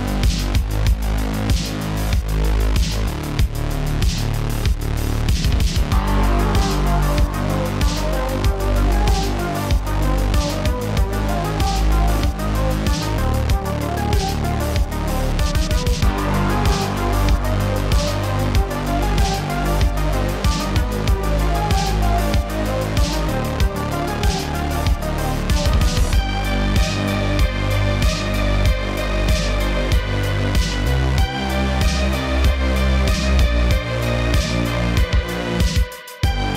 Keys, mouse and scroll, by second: 10.0-18.6 middle drag, 18.6-22.2 drag, 22.4 n, 22.7 middle click, 23.1-23.6 scroll up 7, 23.6 click, 24.2 click, 25.3 click, 25.6 shift+a, 28.8 click, 29.4 shift+a, 36.0 click.